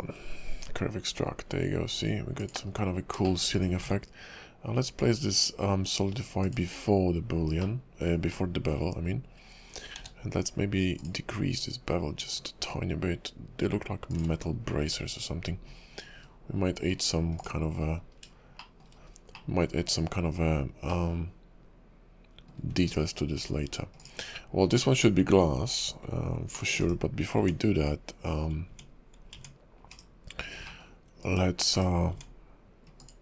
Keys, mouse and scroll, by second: 2.7-3.1 scroll up 2, 3.2 shift+middle click, 3.5 scroll up 2, 3.9 ctrl+`, 8.3 middle click, 8.8-10.0 scroll up 3, 10.0 q, 14.4-14.8 scroll down 8, 14.8 `, 15.2 scroll down 4, 15.6 KP_5, 15.9-16.2 scroll up 5, 16.9 scroll down 2, 17.3 click, 17.8-18.2 scroll up 5, 18.5 shift+middle click, 19.0 scroll up 1, 19.3 middle click, 20.0 KP_5, 20.9 middle click, 22.6 `, 22.8 scroll down 3, 23.3 KP_5, 24.0 click, 24.3-26.1 scroll down 2, 26.5 middle click, 26.8 /, 27.4 Tab, 28.7 Tab, 29.3 Tab, 29.9 /, 30.6 middle click, 31.2 /, 31.7 /, 32.1 Tab, 33.0 click.